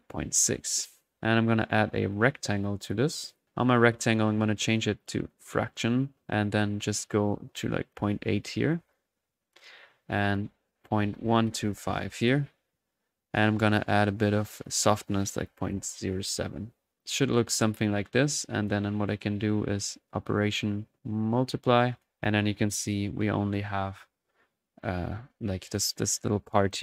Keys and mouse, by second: 1.6 right click, 2.6-3.3 typing, 2.8 click, 5.0-5.9 drag, 6.1 middle click, 7.6 click, 10.1 click, 14.6-15.2 drag, 17.0-18.1 drag, 18.4-19.1 typing, 18.6 drag, 20.3 click, 21.9 click, 24.8 click, 26.7 drag.